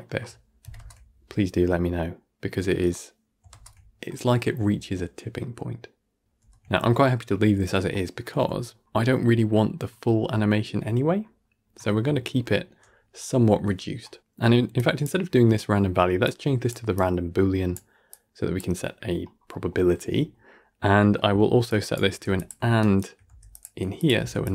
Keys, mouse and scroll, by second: 0.6-1.0 scroll up 1, 1.0-2.1 middle drag, 2.1 shift+Left, 2.2 shift+space, 6.2 shift+space, 6.4-7.0 middle drag, 7.0-7.4 alt+scroll up 2, 7.4-8.0 alt+scroll down 1, 11.1-11.6 alt+scroll up 20, 11.6-12.5 alt+scroll down 5, 13.2-13.9 alt+scroll down 62, 13.9 middle click, 14.6 click, 15.5-15.8 middle drag, 15.8-16.1 scroll up 4, 16.1 click, 16.8-18.1 drag, 19.2 scroll down 1, 19.4-20.2 middle drag, 20.2 scroll down 1, 20.4 middle click, 20.8 scroll down 3, 21.0-21.5 middle drag, 21.5 click, 22.0 g, 22.7 shift+Right, 23.1 g, 23.8 click, 24.1 shift+d.